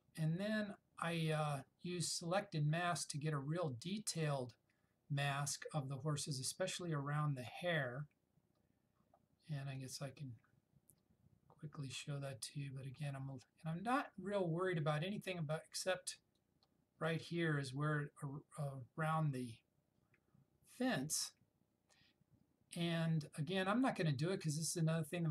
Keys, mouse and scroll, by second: 9.9-13.3 drag, 16.5-17.4 drag.